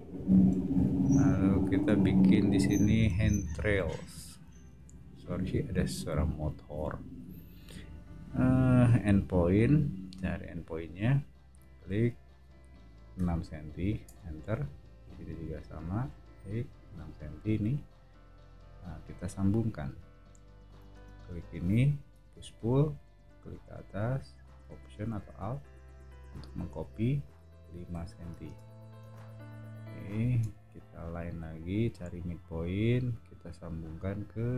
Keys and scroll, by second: 4.7 l, 13.1 6, 14.0 Return, 20.9 space, 22.1 p, 27.9 5, 28.4 Return, 29.0 space, 30.4 l.